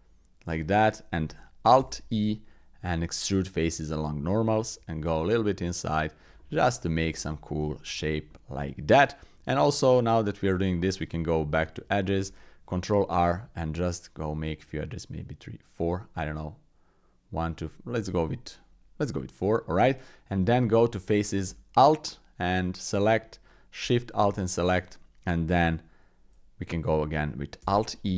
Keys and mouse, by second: 0.0 i, 1.8 alt+e, 6.5 click, 7.3 click, 7.7 shift+click, 8.3 click, 9.7 click, 11.1 Tab, 12.2 ctrl+r, 20.4 Tab, 22.5 alt+click, 27.6 alt+e.